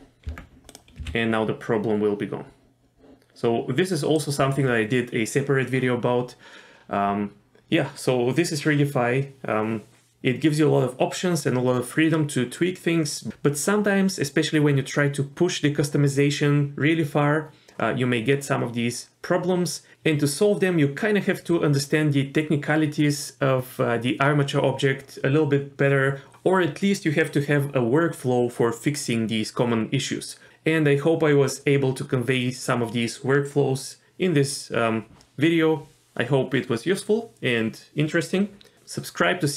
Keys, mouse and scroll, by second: 0.3 Tab, 0.7 click, 1.0 g.